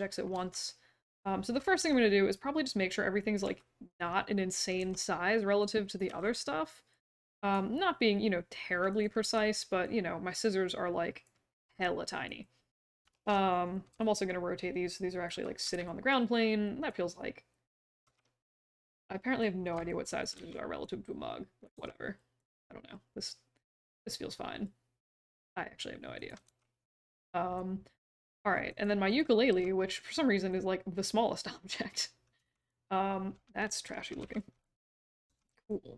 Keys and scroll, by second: 0.3 q, 1.7 r, 3.4 w, 4.8 r, 6.0 w, 9.2 r, 11.6 e, 13.1 ctrl+z, 13.9 j, 18.0 r, 20.3 w, 21.7 r, 26.4 r, 29.5 r, 32.3 q, 34.2 w, 35.2 r.